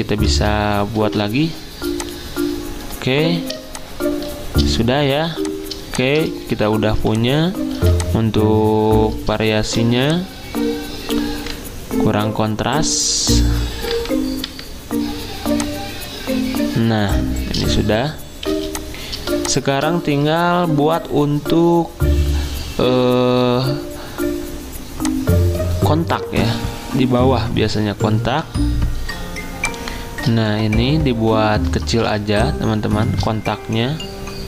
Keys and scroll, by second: 0.9 m, 3.6 z, 10.5 v, 13.9 F6, 14.5 F6, 18.5 z, 28.3 i, 32.1 z.